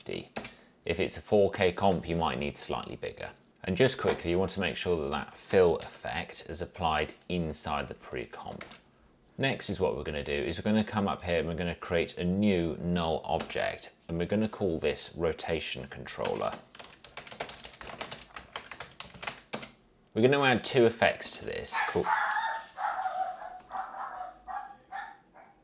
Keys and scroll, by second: 0.0-0.5 typing, 0.5 Return, 6.0 ctrl+x, 8.8 ctrl+v, 13.6 Return, 16.7-19.8 typing.